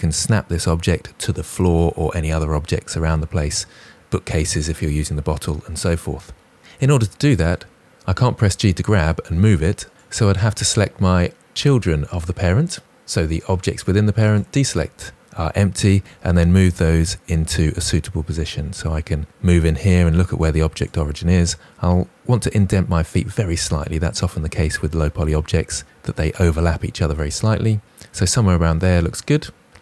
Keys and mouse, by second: 6.6 Tab, 6.6 g, 9.9 click, 13.7 ctrl+drag, 15.8 g, 18.1 click, 19.0-19.4 shift+middle drag, 19.9 g, 20.7 click.